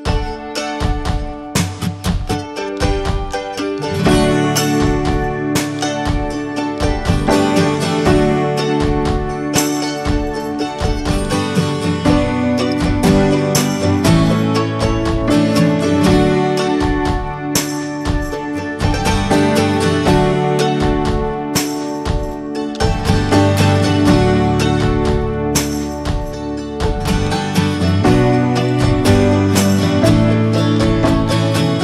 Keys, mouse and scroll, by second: 0.1 drag, 0.4 alt+z, 0.6-1.1 middle drag, 1.1 scroll up 1, 1.3 ctrl+s, 1.6-2.6 middle drag, 2.6 click, 2.9 scroll down 2, 3.2 alt+middle drag, 3.4-3.8 alt+scroll up 3, 3.8 scroll down 1, 3.9 middle click, 4.1-4.9 scroll up 1, 4.9 Tab, 5.1 scroll up 1, 5.3-12.5 shift+middle drag, 12.5 ctrl+r, 14.3 3, 14.5 click, 14.8-16.0 shift+middle drag, 16.0 e, 17.7-18.9 shift+middle drag, 18.9 2, 19.2 click, 19.5 middle click, 20.2 ctrl+b, 24.7-25.9 drag, 25.9 scroll down 2, 26.1-26.5 middle drag, 26.5 Tab, 26.7 drag, 27.0 shift+middle click, 27.1 scroll up 1, 27.3-27.6 middle drag, 27.6 click, 27.8-28.5 right drag, 28.5 click, 28.7-29.7 scroll down 1, 29.7 click, 30.6 drag, 30.9 scroll down 2, 31.0-31.7 shift+middle drag, 31.7 drag.